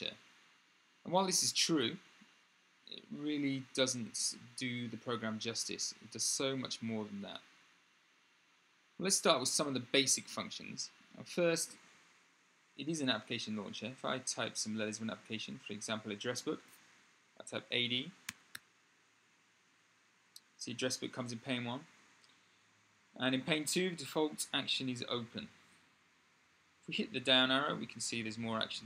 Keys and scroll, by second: 18.0 a, 18.3 d, 23.0 Tab.